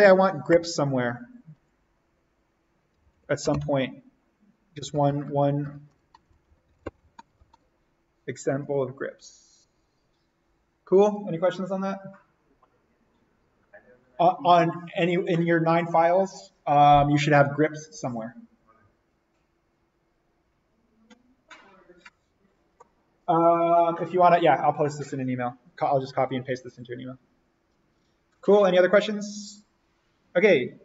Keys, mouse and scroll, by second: 0.5 Return, 2.6-3.9 typing, 4.7 Left, 5.6-7.1 typing, 8.6 click.